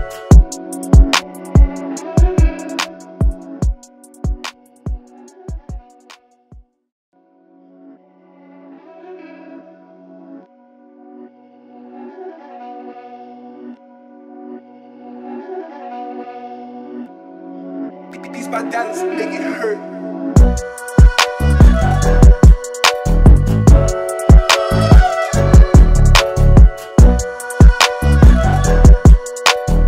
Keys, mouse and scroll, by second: 0.6 alt+scroll down 1, 1.0 space, 1.1-5.1 drag, 5.1 alt+scroll down 1, 5.4 space, 5.5 click, 6.1 space, 6.2-12.5 drag, 12.5 alt+scroll down 1, 13.3 space, 13.4-14.8 drag, 18.2-18.7 typing, 20.0 click, 24.2 click, 29.0-29.8 ctrl+drag.